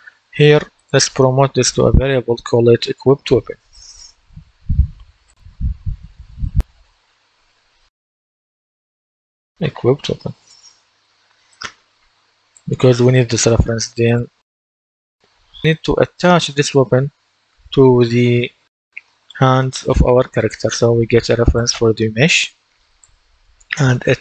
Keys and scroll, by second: 3.4 shift+w, 4.1 BackSpace, 6.6 typing, 7.8-10.7 typing, 11.0 Return.